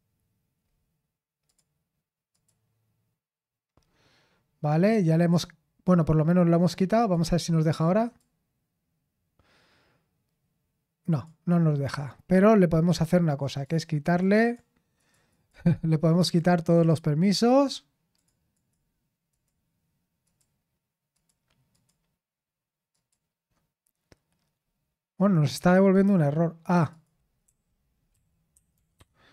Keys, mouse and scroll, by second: 0.6-1.4 scroll down 1, 1.4 click, 2.3 click, 3.8-5.0 scroll up 2, 5.0-7.0 scroll up 1, 7.0 click, 8.0 click, 11.1 click, 11.6-13.6 scroll up 2, 13.6 click, 14.0 click, 14.3 click, 15.0 click, 15.3 click, 16.1 click, 16.7 click, 17.4 click, 18.1 click, 18.5 click, 19.3 click, 20.2 click, 21.1 click, 21.7 click, 22.9 click, 26.9 click.